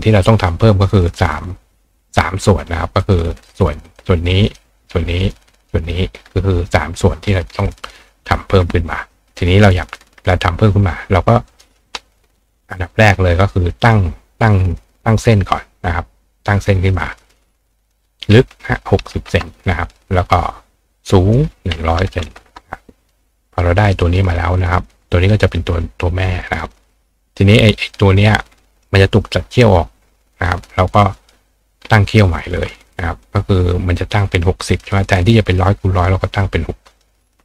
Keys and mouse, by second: 0.2 click, 3.0 click, 3.8 click, 4.4 click, 5.2 click, 5.7 click, 11.5 click, 13.8 click, 15.0-16.6 drag, 17.7 click, 21.1 click, 23.9 click, 24.6-26.7 drag, 27.9 click, 31.0 click, 33.2-34.8 drag, 35.6-37.0 drag.